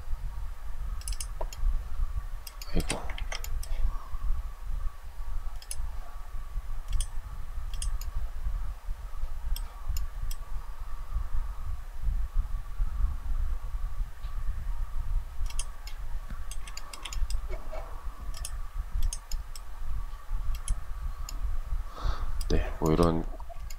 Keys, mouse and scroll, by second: 1.8 shift+middle click, 2.3 ctrl+z, 16.0 shift+middle click, 22.9 shift+middle click.